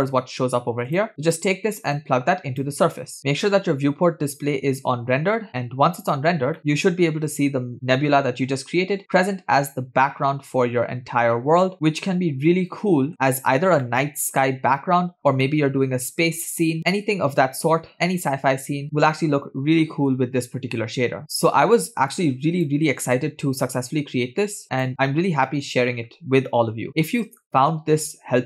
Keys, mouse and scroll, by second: 2.0-3.0 drag, 4.4 click, 6.8-13.1 middle drag, 14.2-15.2 shift+middle drag, 15.7-21.3 middle drag, 22.6 click, 23.6-24.9 drag, 25.9-26.6 shift+middle drag, 26.9-28.4 middle drag.